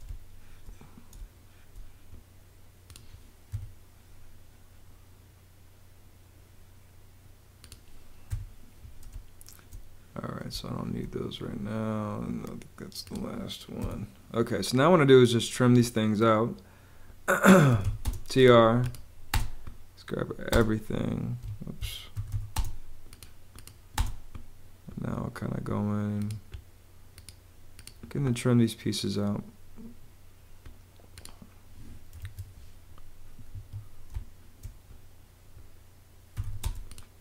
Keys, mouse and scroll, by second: 0.0 space, 3.4 BackSpace, 8.2 BackSpace, 9.0 space, 10.4 space, 13.7 BackSpace, 17.4-19.2 typing, 20.4 space, 21.3 Escape, 21.8-22.7 typing, 23.9 space, 32.1 super+z, 33.4 Escape, 34.0 space, 36.0-36.8 typing.